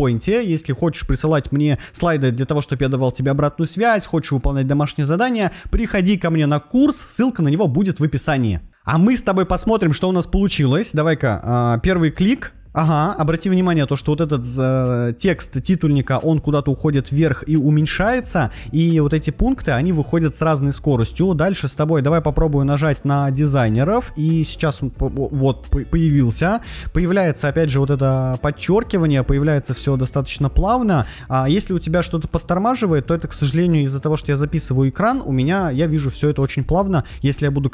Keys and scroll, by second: 11.8 Right, 13.3 Left, 17.3 Right, 18.6 Left.